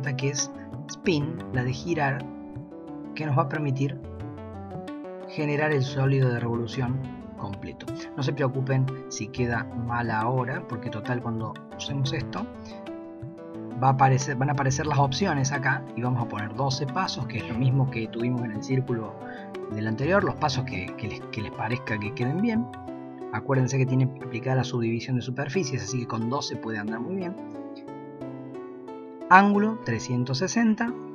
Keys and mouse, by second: 3.1-11.0 drag, 13.7 click, 29.3-31.1 drag.